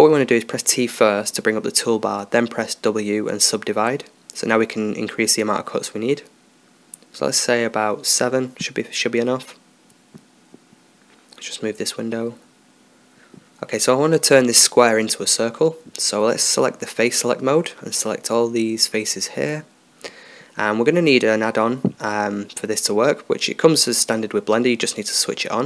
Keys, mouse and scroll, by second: 2.8 w, 4.7-10.2 drag, 12.7-14.0 drag, 14.0-15.9 middle drag, 17.0-18.8 drag, 17.8-21.4 right drag, 24.9-25.6 drag.